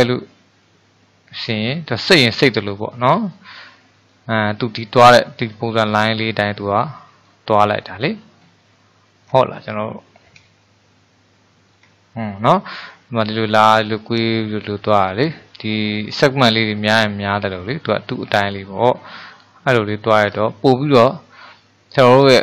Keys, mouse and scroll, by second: 2.5-13.6 middle drag, 19.4-20.4 middle drag, 20.4-20.9 scroll down 4, 20.9-22.2 middle drag, 22.2-22.4 scroll down 5.